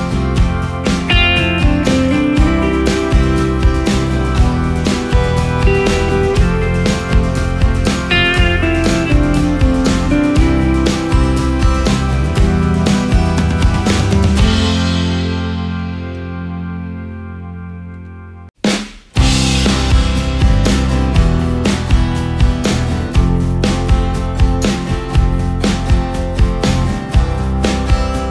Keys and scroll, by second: 1.7 ctrl+space, 12.5 ctrl+space, 16.6 ctrl+space, 17.5 ctrl+space, 18.1 ctrl+space, 18.9 ctrl+space, 20.9 ctrl+space, 25.8 ctrl+space, 26.4 ctrl+alt+space.